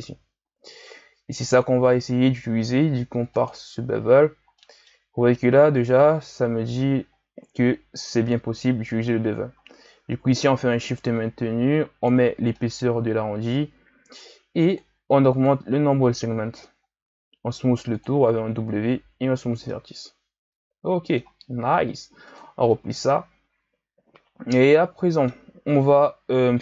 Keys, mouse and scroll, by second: 3.4 click, 4.6-7.6 middle drag, 7.9-11.0 drag, 12.6 middle click, 13.1-14.6 scroll up 1, 14.6-17.0 drag, 17.0 w, 19.0 a, 19.4-19.7 scroll down 1, 19.7-22.3 middle drag, 22.3 click, 23.1-26.1 middle drag.